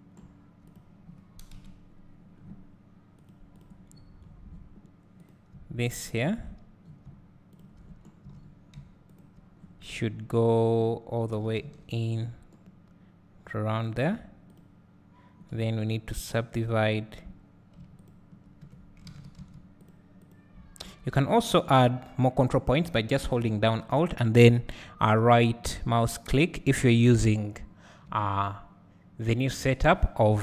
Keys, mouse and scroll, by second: 0.0-0.7 scroll down 1, 0.7 click, 1.6 KP_Decimal, 2.4 scroll up 1, 3.2 click, 3.6-3.9 drag, 3.9 scroll up 1, 5.2-5.9 drag, 6.2 scroll down 1, 6.9 scroll up 1, 7.6 shift+click, 7.9-8.4 scroll down 1, 8.4 scroll up 1, 9.2 shift+click, 9.6-10.2 scroll down 1, 11.5 g, 13.9 click, 16.2 shift+click, 16.9 scroll up 1, 18.1 ctrl+click, 19.1 alt+a, 19.4 Tab, 20.3 click, 21.3 scroll down 1, 28.1 Tab.